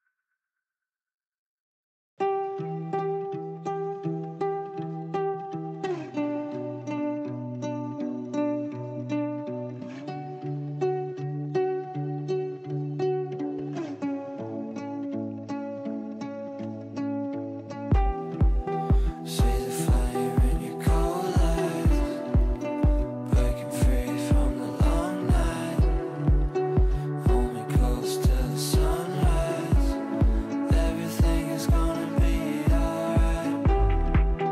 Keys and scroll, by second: 4.7 shift+F2, 4.9 Escape, 14.5 ctrl+z.